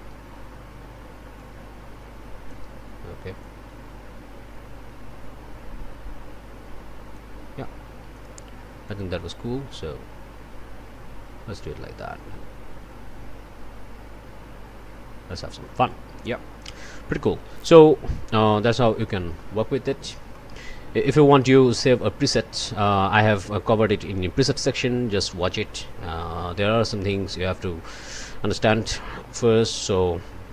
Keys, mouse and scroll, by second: 1.3-2.7 drag, 3.4-7.4 drag, 8.1 click, 8.9 click, 17.5 click, 19.0 click, 20.3 click, 21.1 click.